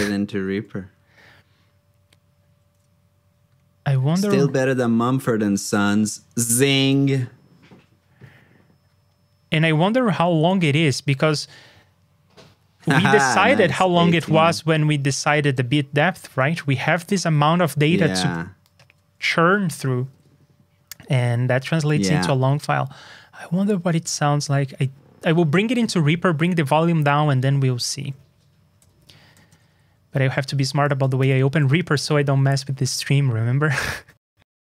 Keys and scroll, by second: 20.1 super+Tab, 29.5 super+Tab, 31.1 ctrl+n.